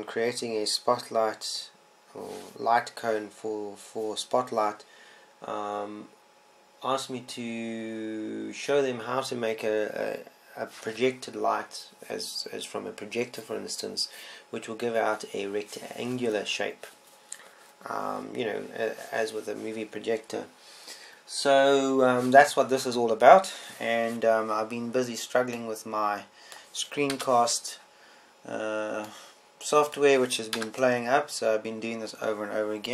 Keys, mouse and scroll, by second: 27.3 middle click, 28.9 KP_0, 32.5 KP_0.